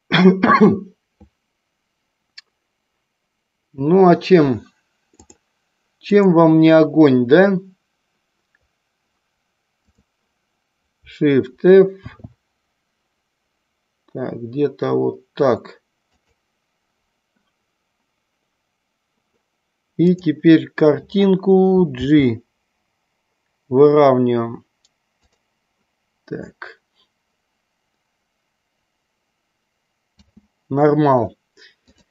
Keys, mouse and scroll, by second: 5.3 click, 6.4 click, 9.9 click, 12.1 shift+f, 16.3 click, 20.3 click, 22.0 g, 30.4 space, 31.9 click.